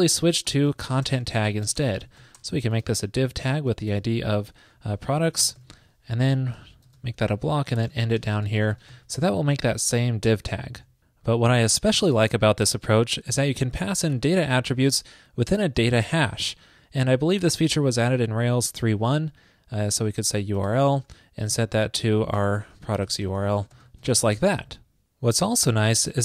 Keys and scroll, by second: 0.0 ctrl+shift+>, 8.0 shift+super+Left, 8.5 ctrl+shift+>, 9.9 super+Right, 13.9 alt+Left, 24.3 super+s.